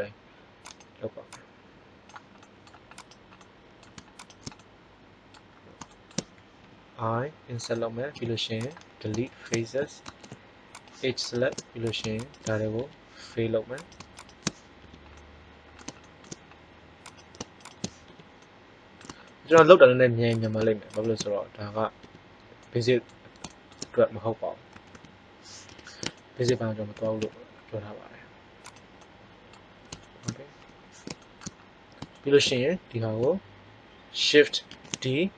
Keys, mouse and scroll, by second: 1.2-3.1 drag, 3.0 right click, 5.3 middle click, 6.5 i, 8.0 x, 10.0 ctrl+Tab, 12.8 f, 14.8 f, 15.2-17.0 middle drag, 18.0 f, 21.5 middle click, 21.9 f, 22.5 middle click, 24.7 a, 24.9 a, 25.6 KP_1, 26.8 s, 28.6-29.7 middle drag, 30.6 KP_7, 34.6 shift+d.